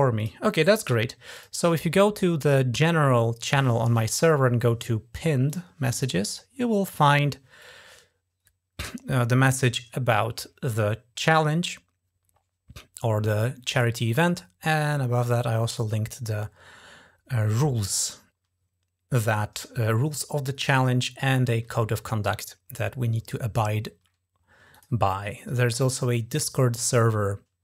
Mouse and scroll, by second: 0.0 click, 1.2 click, 5.3 click, 7.6-8.2 scroll down 2, 15.0 scroll up 2, 19.7 scroll up 2, 24.6 click.